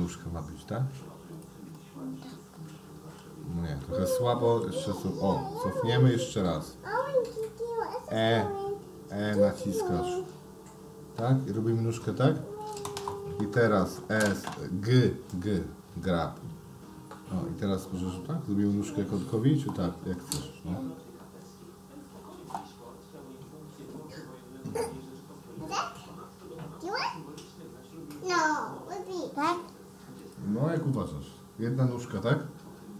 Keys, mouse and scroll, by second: 1.9-3.2 middle drag, 4.0 ctrl+z, 4.3 ctrl+z, 4.5 ctrl+z, 4.6 ctrl+z, 4.8 ctrl+z, 7.3 click, 9.3 e, 16.5 g.